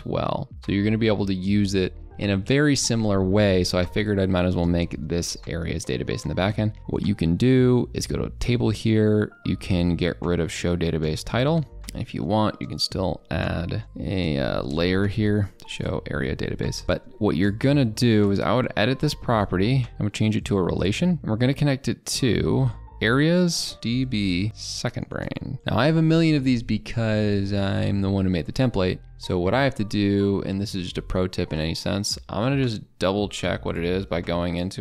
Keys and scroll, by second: 14.7 ctrl+BackSpace.